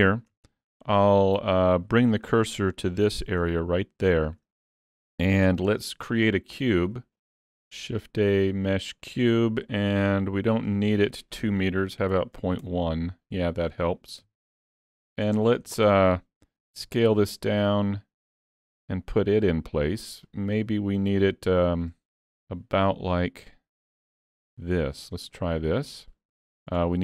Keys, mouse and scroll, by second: 0.3 Tab, 1.3 3, 1.4 click, 2.3 shift+s, 3.2 alt+a, 3.4 Tab, 4.0 middle click, 4.6 shift+middle click, 4.8-5.1 scroll up 3, 7.1 shift+a, 10.6 click, 14.2 KP_3, 15.1 shift+middle click, 15.4 scroll up 2, 15.8 shift+middle click, 16.7 s, 20.6 click, 22.2 s, 25.5 middle click, 26.1 middle click, 26.6 scroll up 3, 26.9 middle click.